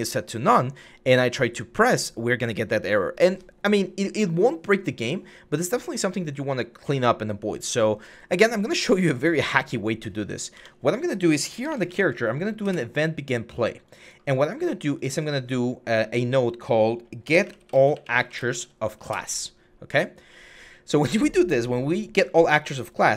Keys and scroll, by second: 10.4 Tab, 11.4-11.8 typing, 12.5 Return, 16.8-18.4 typing, 18.8 Return.